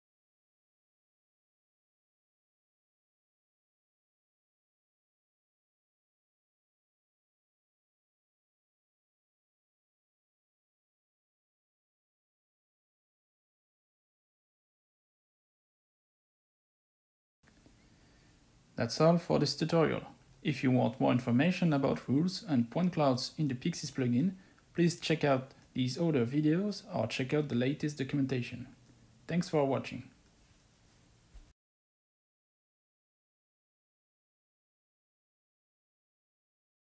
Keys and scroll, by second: 0.0-4.1 typing, 5.2-10.5 typing, 12.4 typing, 13.7 w, 14.7 w, 15.0 space, 16.9 w, 17.4 w, 17.5 space.